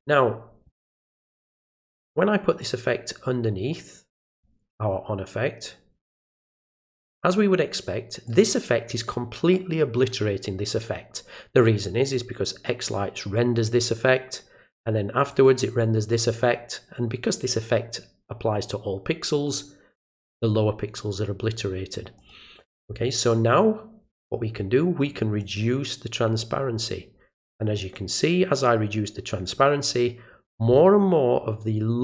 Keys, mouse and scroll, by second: 2.6-4.4 drag, 6.1-7.2 drag, 8.3 click, 15.3 click, 22.2 click, 25.4-27.9 drag.